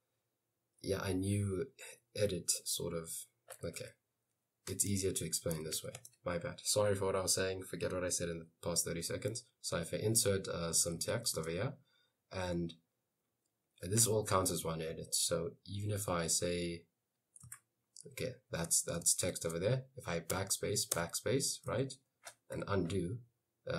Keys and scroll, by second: 5.1-6.2 typing, 10.6-11.7 typing, 16.1 BackSpace, 17.6 Escape, 19.4 shift+a, 21.0 BackSpace, 21.9 Escape, 22.6 u.